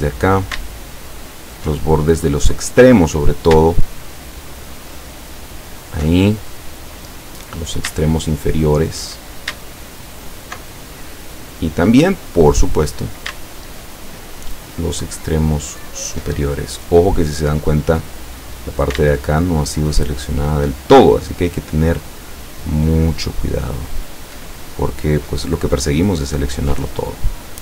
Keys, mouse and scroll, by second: 1.2 alt+shift+right click, 2.1-3.5 alt+shift+middle drag, 4.2 alt+shift+right click, 5.6 alt+shift+right click, 6.3-7.8 alt+shift+middle drag, 8.4 alt+shift+right click, 10.2 alt+shift+right click, 10.8-11.8 alt+shift+middle drag, 12.2-13.3 middle drag, 14.2 alt+shift+right click, 15.8-17.7 alt+shift+right drag, 16.6-17.6 alt+shift+scroll up 2, 17.7 middle click, 17.9 scroll up 1, 19.4 alt+shift+right click, 21.5 alt+shift+right click, 22.8 alt+shift+right click, 24.0 alt+shift+right click, 24.4-25.5 alt+shift+middle drag, 25.5 scroll down 2, 26.2 middle click, 26.6 middle click, 26.9 middle click, 27.5-27.6 middle drag.